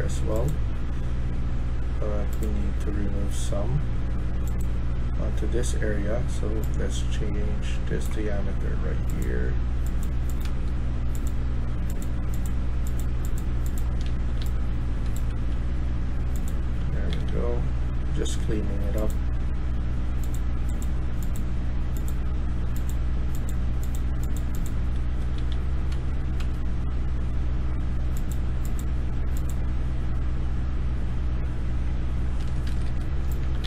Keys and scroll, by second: 10.4 s, 13.5-15.5 typing, 16.7-17.5 typing, 24.9-25.8 typing, 32.6 Escape, 32.8 Escape, 32.9-33.6 typing.